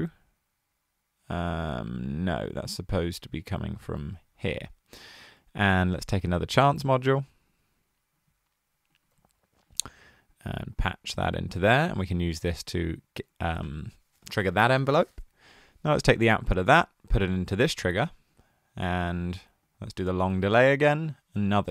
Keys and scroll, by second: 9.1 super+c, 9.8 super+v.